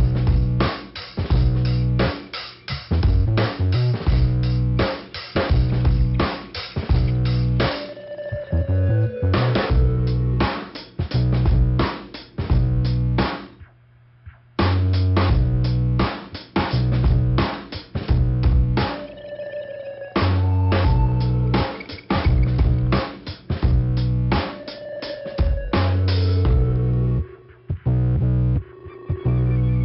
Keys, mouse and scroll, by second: 0.5 scroll up 1, 2.0 click, 2.9 click, 3.7 click, 5.1 click, 7.2 click, 9.3-10.4 scroll down 1, 10.4 right click, 12.6 middle click, 14.1 click, 15.4 click, 16.5 click, 16.6 click, 17.3 click, 18.0 click, 18.6 middle click, 25.4 click, 26.1 click, 26.5 ,, 27.2 right click, 28.0 click, 28.2 click.